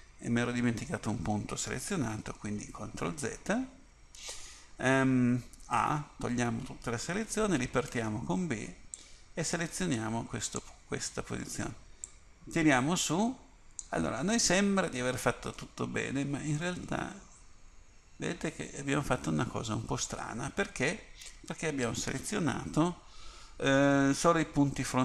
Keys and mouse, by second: 2.9 ctrl+z, 5.9 a, 8.0 b, 12.2-16.7 drag, 16.7 middle click, 22.9 KP_1.